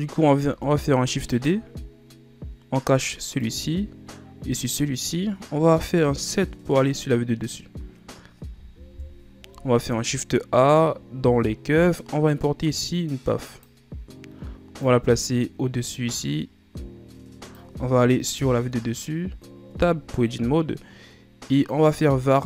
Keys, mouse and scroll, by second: 0.5 shift+d, 3.5 click, 4.8 right click, 6.1 KP_7, 9.0 KP_1, 9.8 shift+a, 14.9-18.1 drag, 18.5 KP_7, 19.8 Tab.